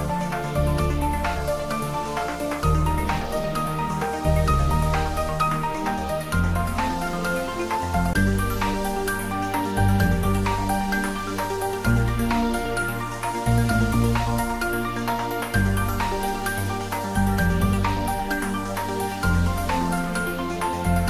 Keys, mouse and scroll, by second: 1.1 scroll down 1, 2.9-5.7 middle drag, 5.7-6.5 scroll up 1, 9.6 click, 13.6 click, 16.3 Tab, 17.0 scroll down 1, 19.8-21.0 scroll up 1.